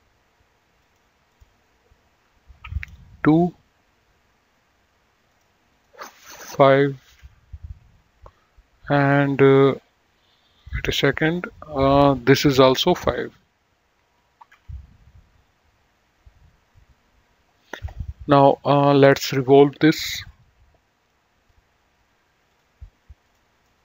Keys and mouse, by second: 1.1 click, 2.8 KP_2, 3.0 Return, 5.5 click, 7.3 KP_5, 7.5 Return, 10.8 click, 14.6 KP_5, 14.8 Return, 14.8 KP_Enter, 19.3 click, 20.3 click, 22.7 click.